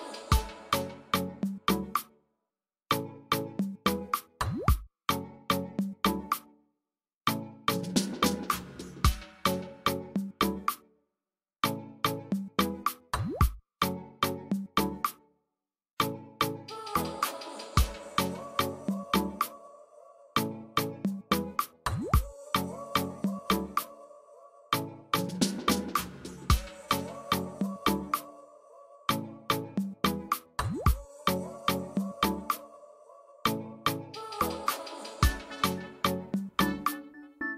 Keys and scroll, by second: 35.9 Escape.